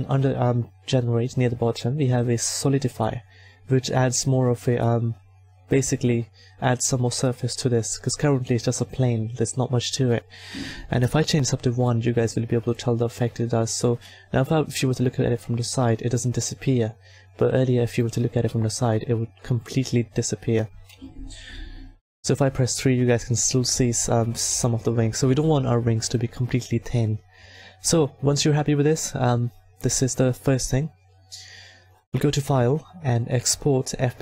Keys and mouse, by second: 4.8 middle click, 9.7-11.8 drag, 13.1 a, 15.9 middle click, 21.4 KP_3, 24.5 KP_1, 26.0-27.7 middle drag, 28.3-30.6 right drag, 30.6 a, 31.9-33.8 middle drag.